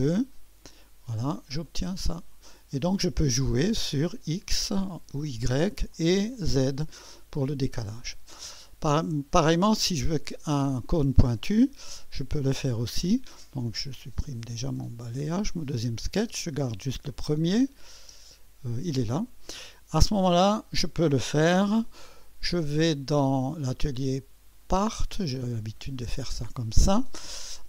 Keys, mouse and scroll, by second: 1.6 click, 2.6-4.0 drag, 5.1 click, 6.0 click, 7.1-8.3 drag, 10.5 click, 12.1 click, 13.7 click, 14.2 Delete, 14.4 click, 14.9 click, 15.2 Delete, 15.5 click, 16.0 click, 16.3 click, 16.3 space, 17.1 click, 18.0 space, 18.2 click, 19.6 click, 21.4 1, 22.0-23.9 drag, 24.5-25.6 drag.